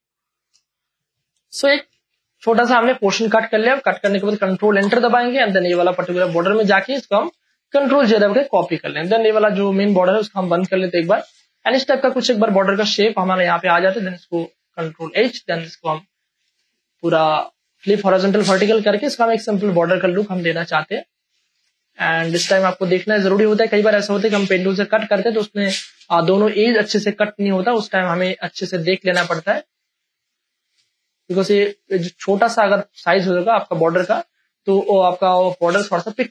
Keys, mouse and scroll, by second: 0.0 ctrl+click, 1.9 space, 2.2 ctrl+click, 2.7 click, 3.3 ctrl+click, 3.7 click, 4.8 ctrl+Return, 5.7 v, 6.1 click, 6.2 space, 6.5 click, 7.9 ctrl+j, 8.6 space, 8.8 click, 9.1 space, 9.3 click, 11.1 v, 11.6-13.9 alt+drag, 13.9 ctrl+t, 14.2 ctrl+right click, 14.3 Right, 15.0 click, 15.1 Return, 16.2 ctrl+e, 16.5 space, 16.7 click, 17.0 space, 17.1 v, 17.6-19.6 alt+drag, 19.6 ctrl+e, 19.9 space, 20.2 click, 20.5 space, 21.3 v, 21.6 ctrl+space, 21.7 ctrl+click, 22.1 ctrl+space, 23.9 ctrl+alt+z, 25.2 space, 26.1 ctrl+alt+z, 27.0 ctrl+space, 27.2 ctrl+click, 27.5 ctrl+space, 27.9 ctrl+click, 28.4 m, 29.3 click, 29.9 space, 30.2 ctrl+click, 31.4 Left, 33.0 Delete, 33.7 space, 33.9 ctrl+click, 34.4 click, 35.3 ctrl+click.